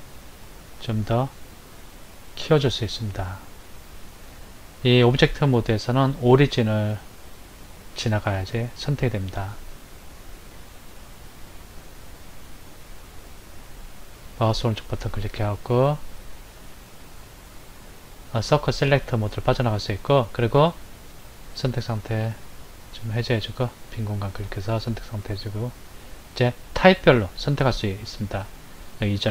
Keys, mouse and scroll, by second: 17.3 click, 22.4 click, 24.5 click.